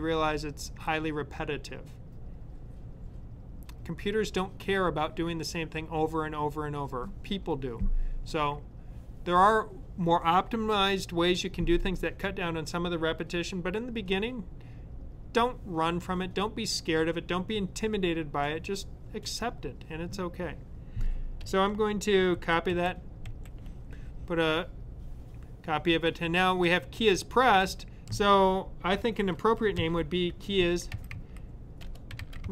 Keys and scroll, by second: 22.2 super+c, 22.7 super+v, 23.2 super+v, 29.7-32.5 typing.